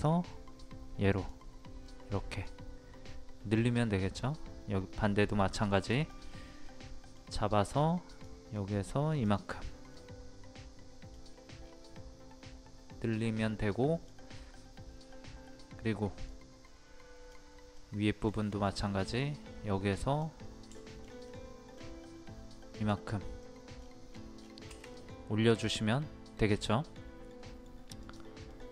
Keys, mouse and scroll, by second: 1.9-2.9 middle drag, 3.6-6.7 drag, 6.7-7.9 middle drag, 8.1 click, 10.0 middle click, 11.3-11.6 scroll down 1, 11.9-14.9 middle drag, 16.3 click, 17.8 middle click, 18.6-19.0 scroll up 1, 20.0 click, 20.7 shift+middle click, 22.7 click, 23.4 middle click, 23.7 scroll down 1, 24.5-24.9 scroll up 1, 24.9 middle click, 28.0 click, 28.5-28.7 middle drag.